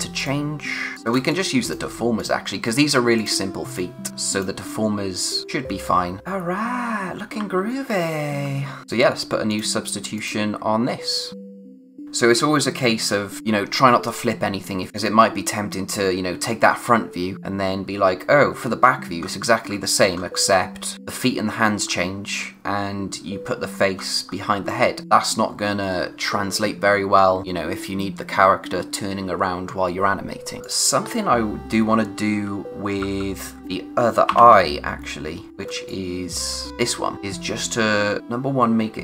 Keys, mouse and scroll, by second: 1.1 space, 1.2 click, 1.6 space, 2.1 click, 4.8-5.4 scroll up 1, 5.4 click, 6.2-7.3 typing, 8.3-8.8 scroll down 1, 8.8 click, 11.4 scroll down 1, 14.9-15.8 scroll down 1, 19.2-19.6 scroll up 1, 19.6-20.1 scroll down 1, 21.8-23.7 scroll down 1, 23.9-24.7 scroll up 1, 30.6 click, 32.3-32.9 typing, 34.2 o, 35.5 scroll down 1, 35.7 space, 35.8 click, 36.2 space, 36.7-38.2 scroll up 1, 38.2 click.